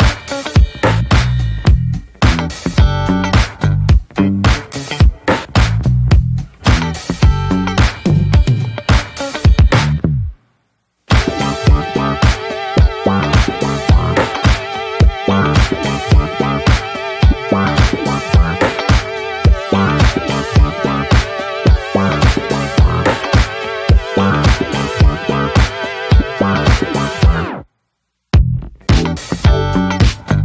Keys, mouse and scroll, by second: 0.3 click, 0.7-1.0 scroll up 1, 1.0 shift+click, 1.6 shift+click, 1.7 scroll down 1, 2.0-3.2 shift+middle drag, 3.2 shift+click, 3.6-4.1 shift+middle drag, 4.1 shift+click, 4.2 scroll down 2, 4.5-5.5 middle drag, 6.5 middle click, 6.8 ctrl+j, 7.4-7.8 middle drag, 7.8 /, 8.8 shift+middle click, 8.9-9.6 scroll up 10, 9.6-10.6 middle drag, 10.6 ctrl+r, 12.2 middle click, 12.4-14.1 scroll up 9, 12.7 middle click, 13.1 shift+middle drag, 13.5 click, 13.5 Tab, 14.1-14.7 middle drag, 14.7-15.2 scroll up 1, 15.2-17.3 middle drag, 17.3 scroll down 2, 17.6 Tab, 17.8 click, 17.9-19.0 scroll down 3, 18.3 shift+middle click, 19.0 click, 19.3 /, 19.9 click, 20.1 shift+middle click, 20.5 shift+click, 21.3 ctrl+j, 21.7 ctrl+a, 21.7 click, 21.9 scroll down 2, 22.1-22.6 middle drag, 22.6 click, 23.2 shift+click, 23.6 shift+click, 24.3 click, 24.6 click, 25.4 ctrl+j, 25.8 click, 26.6 scroll up 1, 26.9-28.1 middle drag, 28.1-28.7 shift+scroll up 1, 28.7 click, 28.9 middle drag, 29.1 scroll up 1, 29.4 click, 29.6-30.1 middle drag, 30.1 scroll up 1, 30.3 click.